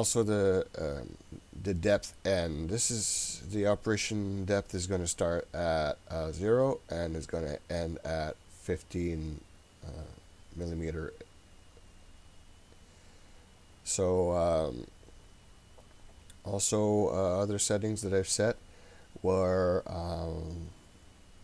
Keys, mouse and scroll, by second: 14.6-16.9 scroll up 8, 16.9-19.6 scroll down 2, 19.6-20.6 scroll down 1.